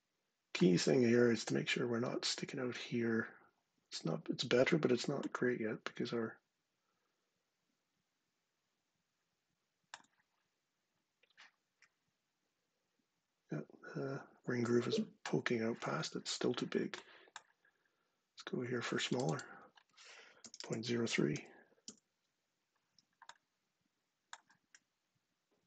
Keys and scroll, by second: 19.9-21.0 typing, 21.5 Return.